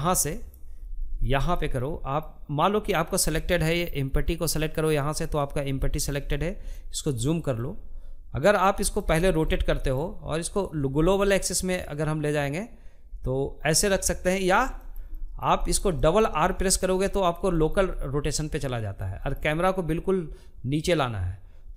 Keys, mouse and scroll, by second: 2.8 click, 3.4-4.5 middle drag, 4.5-5.1 scroll up 5, 5.1-7.6 shift+middle drag, 7.6-8.1 scroll down 4, 8.1-12.9 middle drag, 13.0 scroll down 1, 13.2-14.8 shift+middle drag, 14.8 scroll down 2, 15.0-21.7 shift+middle drag.